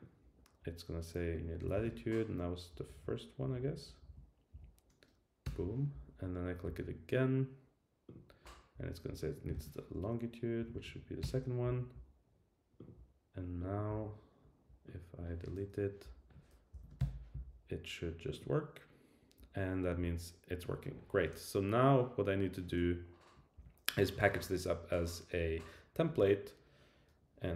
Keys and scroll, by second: 2.7 Up, 3.4 Down, 5.4 Return, 10.6 Down, 11.2 Return, 16.7 shift+Down, 23.5 Down.